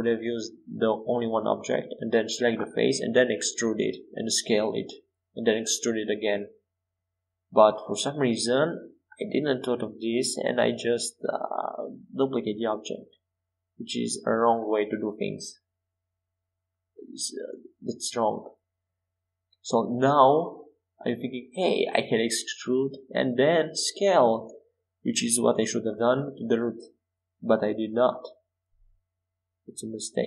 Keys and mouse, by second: 0.6-2.5 middle drag, 1.7 s, 5.6 Tab, 7.2 e, 12.0-14.8 drag, 18.2 e, 20.7 e, 21.3 s, 26.4 e.